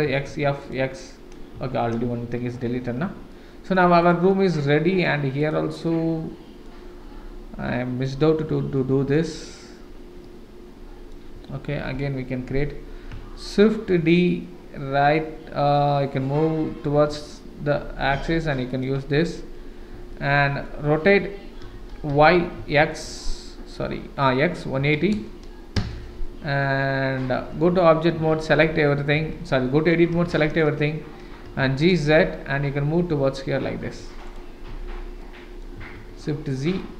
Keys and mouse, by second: 0.0 x, 0.6 click, 1.6 Tab, 2.2 shift+z, 3.3-3.7 middle drag, 4.0 click, 4.4-5.0 middle drag, 5.4 click, 5.8-6.6 middle drag, 8.8-9.1 shift+middle drag, 10.2-11.1 middle drag, 11.9 KP_7, 14.0 shift+d, 20.1-20.6 middle drag, 21.6 r, 27.5 Tab, 28.1 a, 29.1 KP_1, 30.3 shift+z, 31.4 g, 34.7 Tab, 35.2-35.6 middle drag, 36.0 shift+z, 36.8-36.9 middle drag.